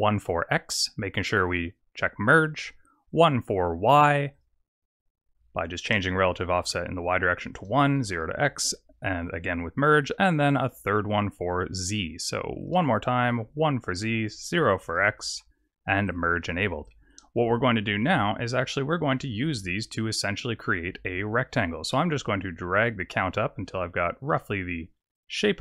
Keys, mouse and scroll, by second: 2.2 click, 3.0 click, 3.4 click, 5.8 click, 7.5 click, 9.2 click, 9.9 click, 10.4 click, 12.5 click, 14.2 click, 16.0 click, 16.8 click, 18.0-18.6 scroll up 1, 18.6 middle click, 18.6 scroll up 2, 20.7 click, 22.2 shift+click, 25.1 click.